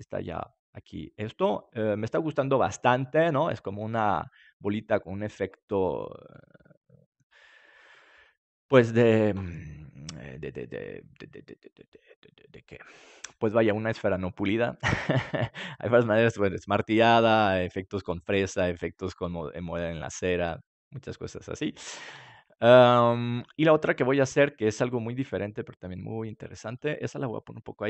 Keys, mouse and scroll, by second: 2.6-8.0 middle drag, 15.1 middle click, 25.9-27.8 drag.